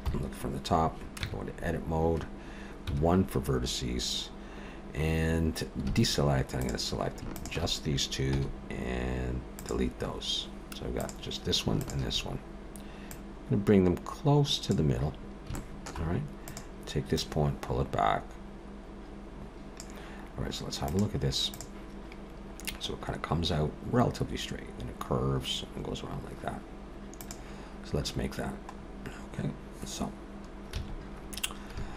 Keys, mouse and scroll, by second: 0.1 KP_7, 1.2 Tab, 2.9 1, 5.9 alt+a, 6.6 click, 7.3 shift+click, 8.3 x, 11.0 click, 11.8 shift+click, 13.1 click, 15.1-15.5 scroll up 2, 15.5 shift+middle click, 16.5 click, 17.2 click, 28.8-30.7 scroll up 1, 30.7-31.0 scroll up 2, 30.7 a, 31.7 a.